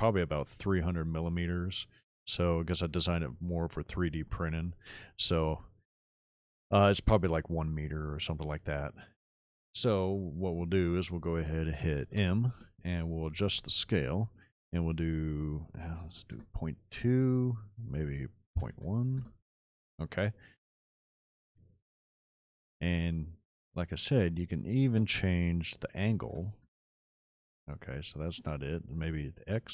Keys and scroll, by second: 12.1 m, 15.7 ., 16.1 2, 16.4 Return, 18.4 ., 18.8 KP_1, 19.3 Return, 26.1 KP_9, 26.2 KP_0, 26.7 Return, 29.5 KP_9.